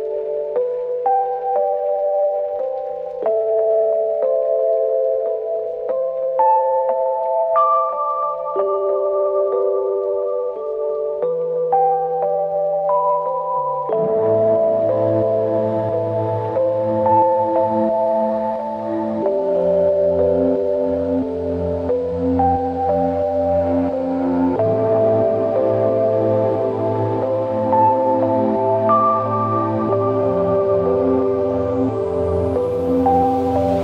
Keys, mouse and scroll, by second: 0.9 double click, 2.6 ctrl+click, 4.7 double click, 6.1 shift+click, 8.5 double click, 20.5 click, 20.6 alt+click, 21.6 alt+click, 21.7 alt+click.